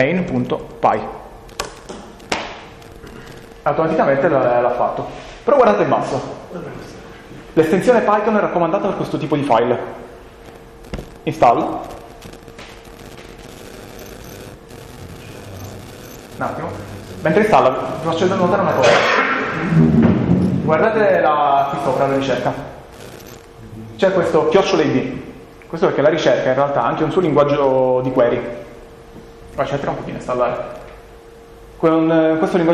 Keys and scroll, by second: 0.0-1.4 typing, 1.6 Return.